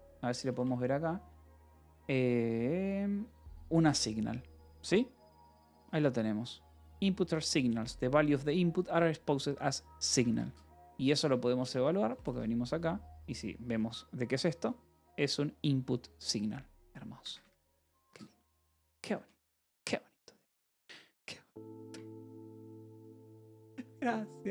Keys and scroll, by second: 1.1 shift+k, 10.5 Escape, 10.7-12.4 typing, 14.4 shift+k, 17.1 Escape, 18.8 j, 19.7 k.